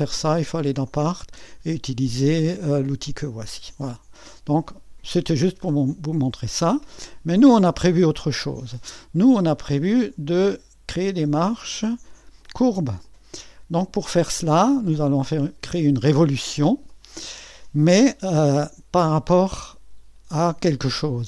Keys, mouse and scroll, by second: 0.0 click, 4.6-6.2 drag, 9.0 click, 9.4-10.6 scroll down 1, 11.9 click, 13.9 click, 15.0-21.0 drag.